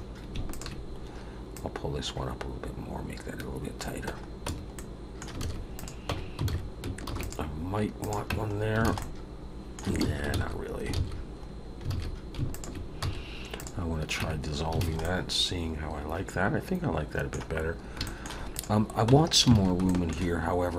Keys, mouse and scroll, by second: 0.0-0.3 scroll up 1, 0.5 alt+shift+click, 1.5 click, 4.5 Tab, 4.7 middle click, 5.4 alt+a, 5.7 click, 6.1 Tab, 6.5 alt+a, 7.0 ctrl+r, 8.3 Tab, 8.5 scroll down 1, 8.8 alt+a, 9.0 middle click, 10.0 ctrl+z, 10.3 ctrl+z, 10.9 ctrl+z, 11.5 scroll up 2, 11.9 alt+a, 12.5 alt+shift+click, 13.0 x, 14.2 Tab, 14.5 scroll down 2, 14.8 alt+a, 15.0 middle click, 17.6 scroll up 2, 18.0 shift+middle click, 18.5 click, 19.1 Tab, 19.5 alt+a, 19.8 shift+middle click.